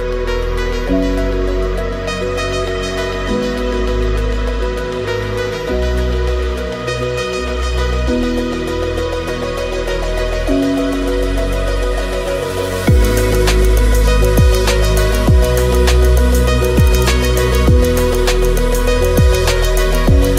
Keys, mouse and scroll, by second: 0.0 middle click, 0.6 alt+d, 0.7 shift+s, 1.1 KP_Decimal, 1.4 click, 1.7 middle click, 2.1 click, 2.3 g, 2.9 alt+d, 3.2 shift+s, 3.3 shift+click, 3.6 shift+middle click, 4.1 shift+middle click, 4.5 middle click, 5.3 alt+d, 5.5-8.5 typing, 5.8 middle click, 5.9 shift+middle click, 7.3 click, 7.8 click, 8.0 alt+d, 8.4 click, 8.8 middle click, 10.3 ctrl+click, 10.6 click, 10.9 alt+d, 11.0 shift+s, 11.4 KP_Decimal, 12.1 middle click, 12.3 middle click, 12.6 click, 14.6 shift+s, 14.7 shift+s, 15.0 shift+s, 15.3 middle click, 15.7 click, 15.9 click, 16.5-19.9 typing, 16.8 middle click, 17.1 click, 17.2 middle click, 17.6 click, 17.7 alt+d, 18.3 middle click, 19.0 alt+d.